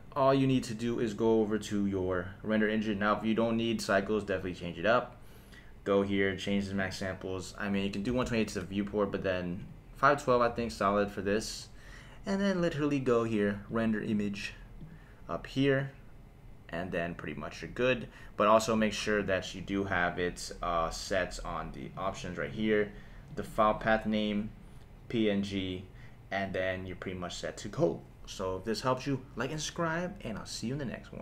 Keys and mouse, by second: 1.0 click, 6.8-8.6 drag, 9.6-10.9 drag, 13.7 click, 14.1-15.0 drag, 21.8 click, 23.3-31.2 drag.